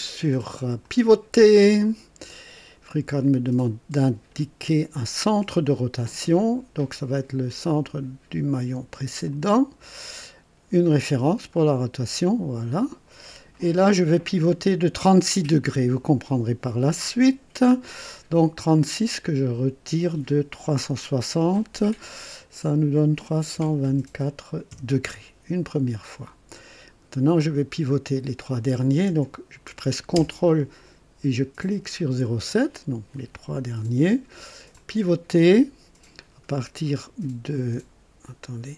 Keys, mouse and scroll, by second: 0.8 click, 2.3-2.7 scroll up 1, 3.2 right click, 9.2 click, 11.6 click, 23.2 KP_3, 23.5 KP_2, 23.8 KP_4, 24.6 KP_Enter, 26.5-27.3 right drag, 31.6 ctrl+click, 34.7 click.